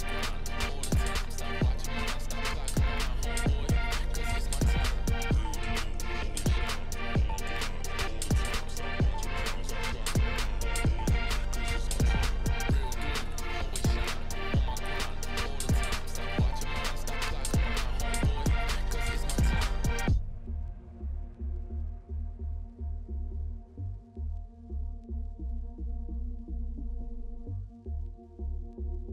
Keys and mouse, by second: 0.0 Tab, 0.5 shift+s, 2.1 shift+d, 2.7 p, 3.1 Tab, 3.3 click, 4.8 Tab, 5.0 a, 5.3 click, 5.4 middle click, 5.9 e, 9.0 a, 9.5 shift+n, 9.8 Tab, 11.1 click, 12.8 ctrl+2, 13.6 right click, 14.1-15.1 middle drag, 15.8 middle click, 16.1 middle click, 17.7 KP_7, 19.6 middle click, 19.8 Tab, 20.5 KP_7, 22.4 k, 26.9 z, 27.5 middle click, 28.6 z, 29.0 Tab.